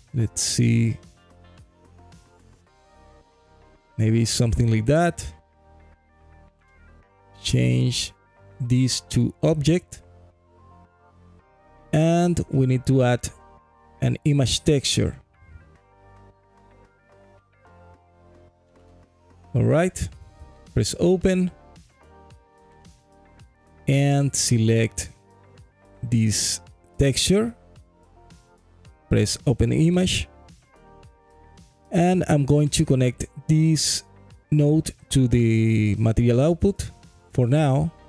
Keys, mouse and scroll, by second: 7.9-11.0 drag, 11.6-13.1 middle drag, 13.6 click, 13.9 shift+a, 19.5 scroll down 1, 21.9 click, 30.5-32.5 drag, 32.5 middle click, 32.9-34.1 scroll down 2, 34.1-35.6 drag, 34.1-34.7 scroll down 1, 37.0 middle click.